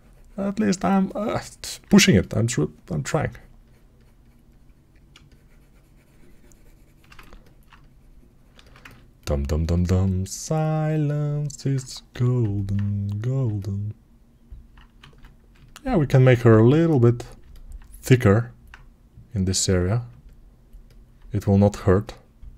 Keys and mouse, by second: 6.9-22.5 ctrl+alt+right drag, 12.0 g, 14.9 ctrl+z.